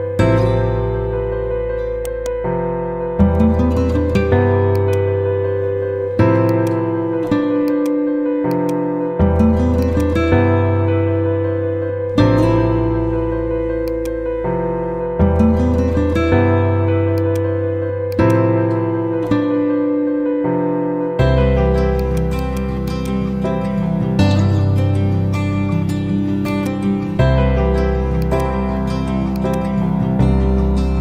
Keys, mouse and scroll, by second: 1.9 right click, 4.7-5.6 click, 10.1 ctrl+a, 13.8 click, 17.1 click, 18.5 ctrl+a, 21.9 click, 23.3 ctrl+z, 26.4-31.0 drag.